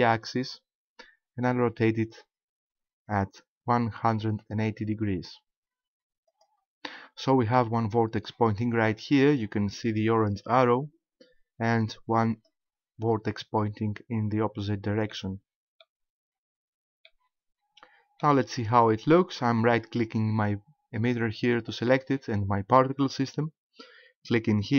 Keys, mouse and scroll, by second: 6.4 ctrl+click, 6.9 middle click, 9.4-10.9 scroll up 1, 12.4 right click, 15.1 middle click, 16.2 scroll down 2, 17.1 middle click, 21.0 right click.